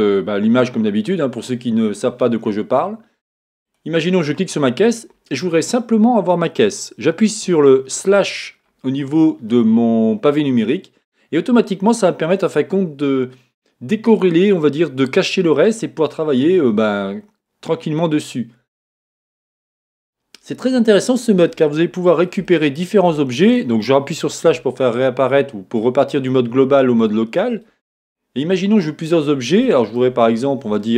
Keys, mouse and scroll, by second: 3.6 click, 7.4 click, 8.3-9.5 scroll down 1, 13.5-30.9 middle drag, 24.5 KP_Divide, 30.2-30.7 scroll up 2.